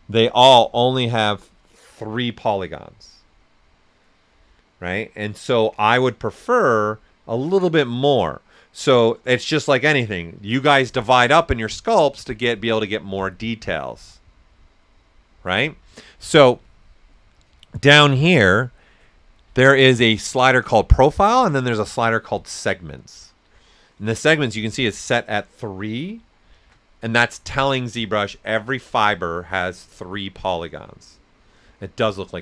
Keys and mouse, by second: 17.3-26.5 drag, 26.5 shift+m.